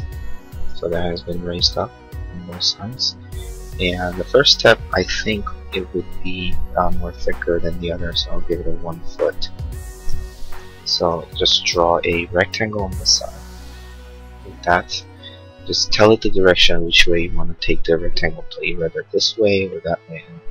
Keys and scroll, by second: 5.5 r, 11.3 r.